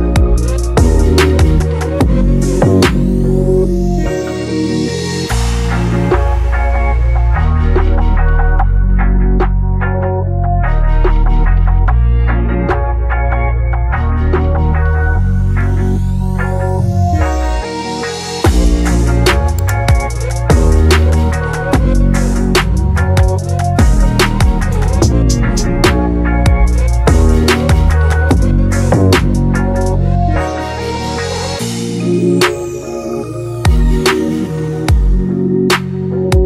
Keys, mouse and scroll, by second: 1.3-3.6 middle drag, 3.6 click, 7.3 click, 8.3 scroll up 2, 9.2-10.3 drag, 10.3 KP_0, 14.0 click, 17.9 click, 18.4-19.8 shift+middle drag, 19.8 ctrl+alt+KP_0, 20.6-21.1 scroll down 1, 22.1 click, 25.7-27.8 drag, 27.8 middle click, 28.2 scroll down 1, 28.6-29.3 scroll up 3, 29.3 click, 30.2-31.3 scroll down 1, 31.3-33.0 drag, 33.0-33.8 scroll down 1, 33.8-36.0 drag.